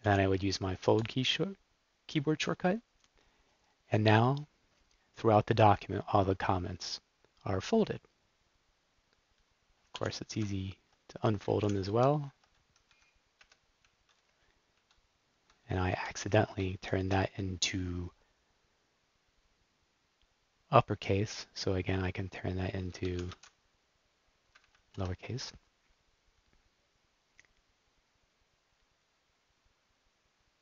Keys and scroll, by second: 0.0 super+k, 0.9 f, 9.9 super+k, 10.3 super+u, 11.6 shift+super+k, 11.9 shift+super+u, 12.9 ↻, 13.3 Up, 13.7 Down, 14.6 Right, 15.2 Right, 16.7 shift+super+p, 22.7-23.7 typing, 24.4 Up, 24.5 Up, 24.8 Return.